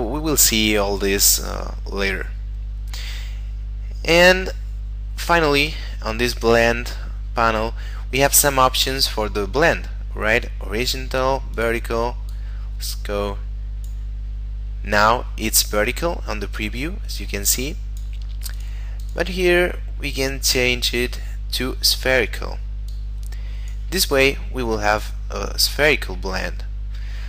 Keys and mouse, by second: 6.7 middle click, 11.6 click, 17.2 click, 21.8 click.